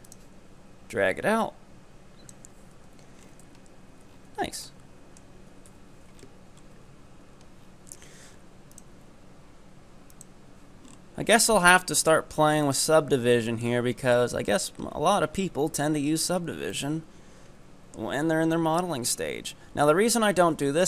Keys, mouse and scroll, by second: 2.8 Tab, 3.2-4.1 scroll up 1, 4.1 scroll down 6, 4.6-5.7 middle drag, 5.7 KP_1, 6.2-6.8 scroll up 12, 6.8 Tab, 7.3 Tab, 7.6 scroll down 8, 10.3 click, 10.9 scroll up 5, 12.7 click, 13.5-14.6 shift+middle drag, 14.6 Tab, 15.1 Tab, 15.4-15.8 scroll up 5, 16.0-16.5 scroll down 9, 16.7-18.1 middle drag, 18.1 scroll down 4, 18.8-19.2 scroll up 7, 19.2 Tab, 19.6 Tab, 20.1-20.7 scroll down 1, 20.7-20.8 shift+middle drag.